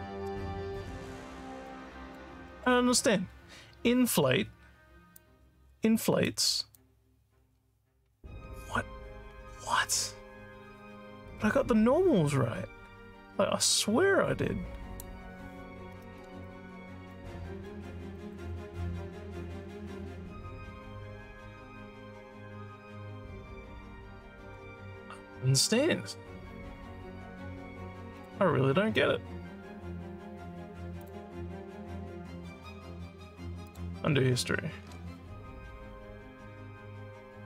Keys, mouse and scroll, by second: 0.7-2.1 alt+drag, 2.5 alt+middle click, 5.1-6.3 drag, 6.7-15.0 drag, 16.4 alt+click, 17.6 alt+middle click, 18.2 alt+click, 28.1 click, 31.0 click, 33.6 click.